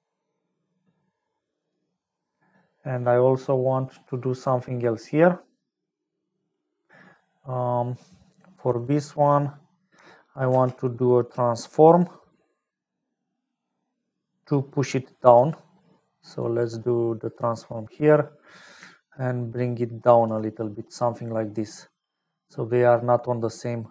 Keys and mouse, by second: 8.6 middle click, 9.1 middle click, 10.5 shift+a, 17.3 click, 19.2-20.6 shift+drag, 20.8 middle click, 22.3-23.9 middle drag, 22.7 click.